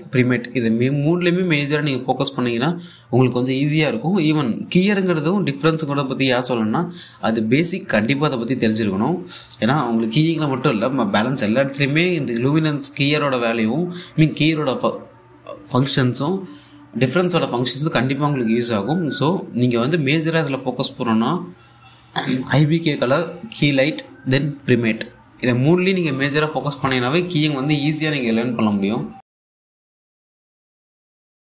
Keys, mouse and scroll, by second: 16.8-17.7 scroll up 1, 17.9 scroll up 1, 18.0 click, 19.9 scroll up 1, 20.2 click.